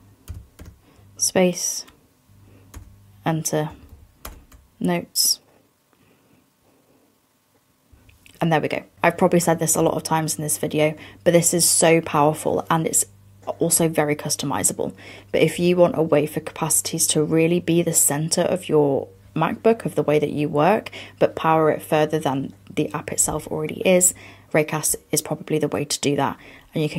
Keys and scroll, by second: 3.8 fn+Down.